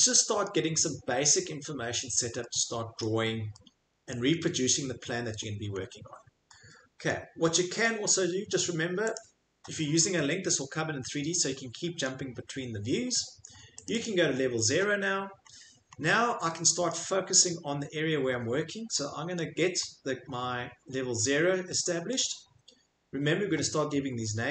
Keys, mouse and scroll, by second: 0.5 middle click, 0.7 middle click, 0.7 middle click, 1.3 middle click, 1.4 middle click, 1.9 middle click, 2.1 middle click, 2.1 middle click, 3.0 middle click, 4.1 middle click, 4.8 middle click, 4.9 middle click, 5.5 middle click, 5.6 middle click, 5.7 middle click, 6.1 middle click, 7.0 middle click, 7.8 middle click, 9.2 click, 10.3 middle click, 10.4 middle click, 12.1 shift+middle click, 12.3 shift+middle click, 13.8 right click, 14.0 right click, 15.1-16.0 scroll, 16.9 scroll, 17.9-18.5 scroll, 19.3 middle click, 19.8 middle click, 19.9 middle click, 22.1 middle click.